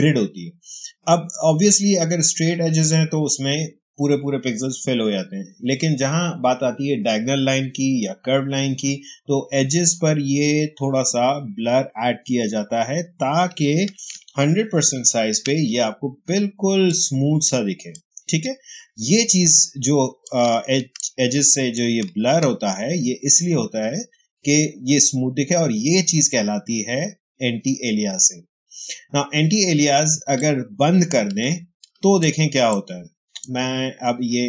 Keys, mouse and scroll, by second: 14.8 ctrl+1, 16.2 space, 16.8 click, 16.9 space, 19.2-24.7 ctrl+drag, 30.0 ctrl+space, 30.3 ctrl+click, 30.5 ctrl+space, 30.7 h, 32.6 ctrl+click, 32.7 ctrl+space, 33.2 ctrl+space.